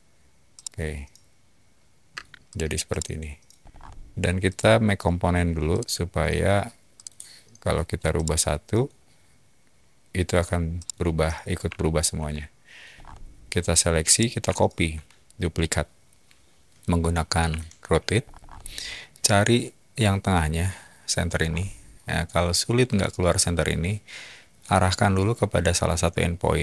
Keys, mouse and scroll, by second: 0.5-2.1 middle drag, 2.1 space, 2.4 click, 2.9-3.3 middle drag, 3.6 scroll down 1, 4.4 right click, 5.7 click, 6.9 click, 8.1-8.7 middle drag, 10.7-12.7 middle drag, 12.9 scroll down 2, 14.1-14.8 middle drag, 17.5 q, 18.2 middle click, 20.4-20.7 scroll, 21.4 middle click, 21.4 scroll.